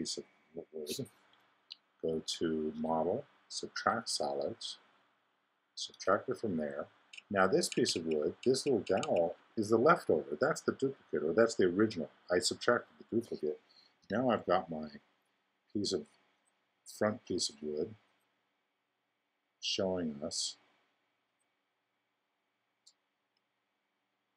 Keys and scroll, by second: 14.0 i.